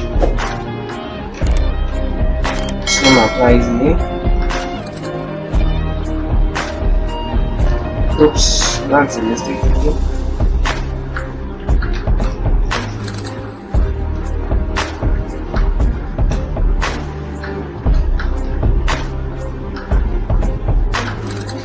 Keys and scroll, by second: 1.2 ctrl+Return, 7.1 ctrl+Return, 12.4 shift+Home, 21.5 shift+Home.